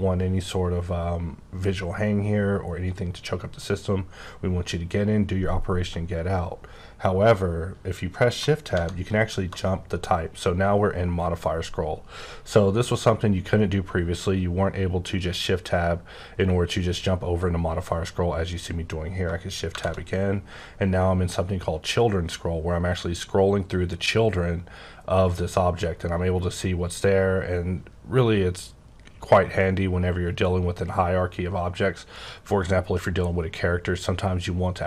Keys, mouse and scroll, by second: 1.3-5.8 scroll up 16, 5.8-7.2 scroll up 2, 7.2-8.3 scroll up 2, 8.7 Tab, 10.8-11.9 scroll up 8, 11.9-13.0 scroll up 6, 13.0-13.8 scroll up 7, 14.1-14.5 scroll down 11, 15.0-15.9 scroll down 8, 15.9-19.1 scroll up 22, 19.1 scroll up 2, 19.6 Right, 20.6-22.2 scroll up 8, 22.2-22.5 scroll up 4, 23.1-23.6 scroll up 3, 23.6 scroll down 1, 23.8-25.5 scroll up 7, 25.5 scroll, 25.6-27.1 scroll down 21, 27.1-29.8 scroll up 17, 30.1-31.4 scroll down 7, 31.4-33.2 scroll up 1.